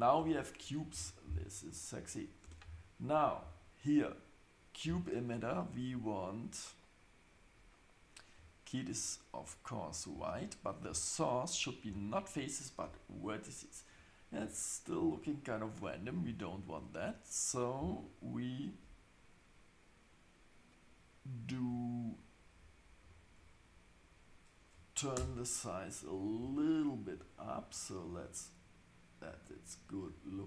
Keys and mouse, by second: 0.2 Tab, 0.9 shift+Left, 1.9 click, 2.4 Tab, 10.7 click, 11.5-12.4 drag, 23.0 click, 25.2 Tab, 26.4 s.